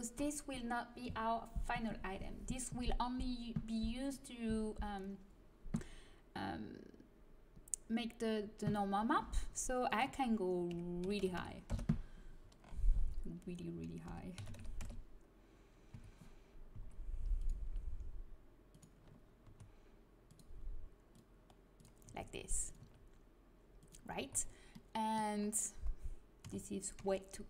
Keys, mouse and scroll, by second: 9.9-11.0 drag, 12.7 middle click, 14.0 r, 15.9 z, 16.7 s, 17.6 g, 19.4 s, 22.0 s, 22.8 g, 23.1-24.4 middle drag, 24.1 z, 26.4 s.